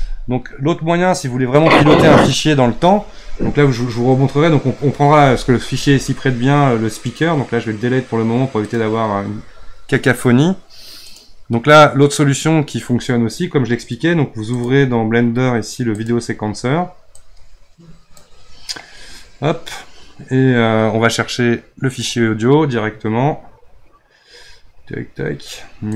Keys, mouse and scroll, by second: 7.0-10.2 right drag, 14.5-20.3 drag.